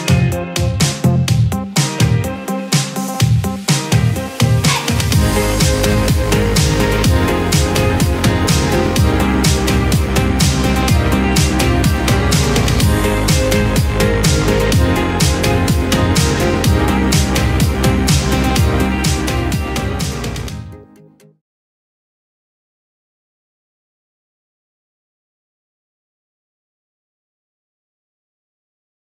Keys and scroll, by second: 6.4 ctrl+k, 11.7 ctrl+c, 12.7 ctrl+v, 14.3 ctrl+g.